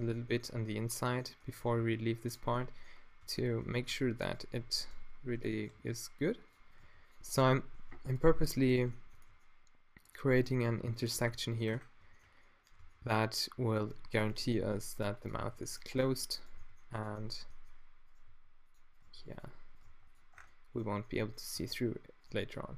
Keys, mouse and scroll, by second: 1.5 g, 2.4 click, 3.2 Tab, 3.9 Tab, 4.2-5.3 drag, 4.6 z, 5.3 z, 5.7 g, 6.5 click, 6.8 g, 9.1 g, 11.2 Tab, 12.8 Tab, 14.6 g, 15.3-16.3 drag, 15.5 g, 16.5 g, 17.6-20.1 drag, 18.3 g, 19.0 g, 19.8 g, 20.3 Tab, 21.3 click, 21.3 middle click, 21.3 right click, 21.5 Tab.